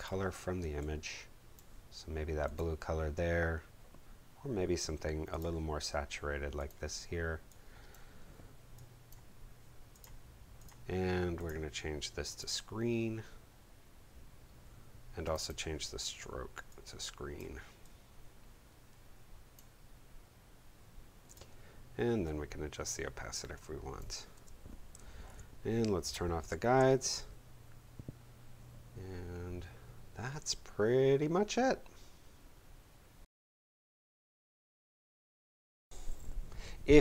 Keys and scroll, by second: 24.3 shift+space, 24.9 shift+super+space, 25.2 shift+super+0, 26.4 shift+super+;.